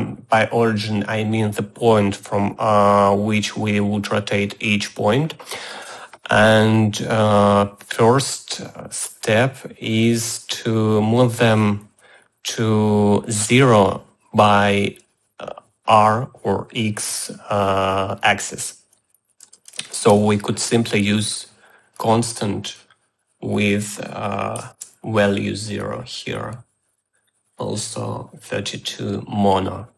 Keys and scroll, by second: 19.7-20.9 typing, 25.1 Return.